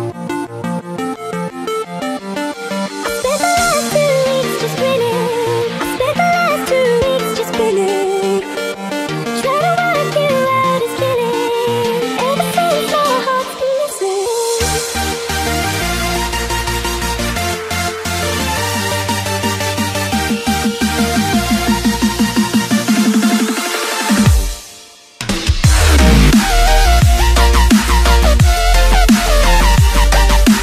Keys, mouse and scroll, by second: 2.3 click, 3.9-6.0 drag, 6.0 KP_7, 8.1 KP_7, 10.4 click, 14.7-18.3 drag, 24.7-30.6 drag.